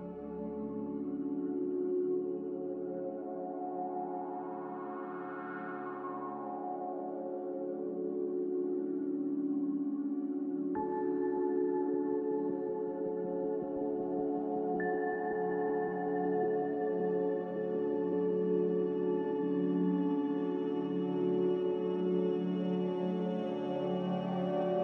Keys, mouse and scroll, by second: 11.4 Delete, 12.3 z, 20.3 b.